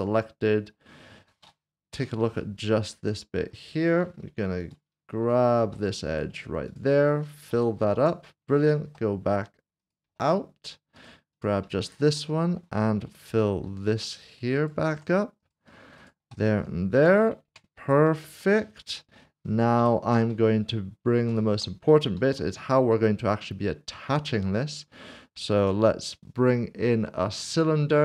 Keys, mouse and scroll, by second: 1.9 /, 3.3 middle click, 4.6 click, 5.7 2, 6.1 click, 6.7 shift+click, 7.5 typing, 8.0 Tab, 8.5-8.9 typing, 10.2 typing, 11.3 double click, 11.8 typing, 12.2 middle click, 13.9 typing, 15.4 Tab, 16.0 shift+click, 17.5 Tab, 18.2 middle click, 20.0 /, 21.0 /, 21.3 shift+right click, 22.2 typing, 25.3 typing, 27.3 click.